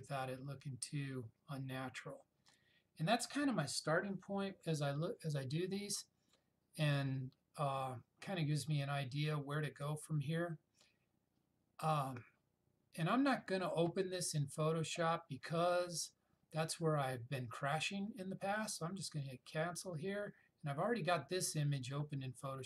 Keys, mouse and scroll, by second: 19.4 click.